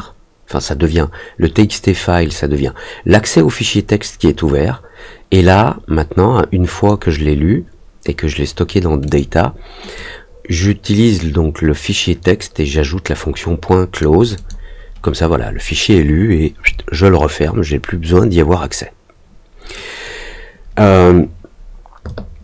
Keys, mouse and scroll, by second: 5.4-6.8 drag, 9.0 click, 9.9-13.9 drag, 14.3 click.